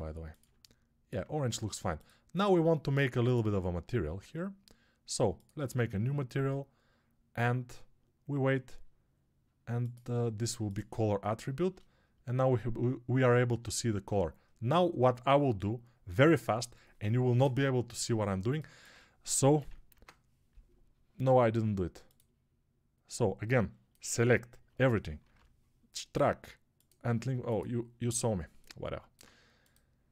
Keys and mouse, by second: 18.3-30.1 shift+right drag, 19.4 ctrl+l, 24.0-28.1 shift+drag, 24.0-28.1 shift+middle drag, 25.1 ctrl+l.